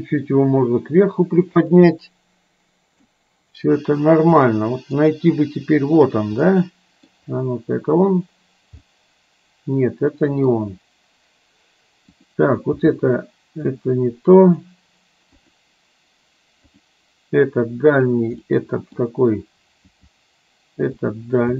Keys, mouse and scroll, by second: 2.1-3.3 middle drag, 4.6 middle click, 5.1 scroll down 1, 6.2 click, 6.6 middle click, 8.9-10.6 middle drag, 12.3 click, 12.8 g, 14.6 click, 15.4 click, 18.1 click, 18.6 middle click, 19.9 g.